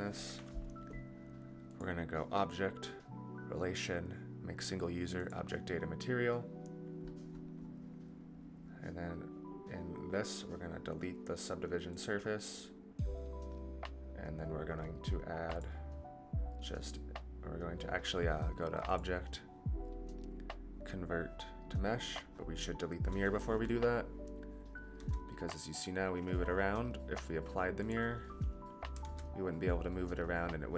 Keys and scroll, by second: 24.9 g, 29.0 ctrl+z.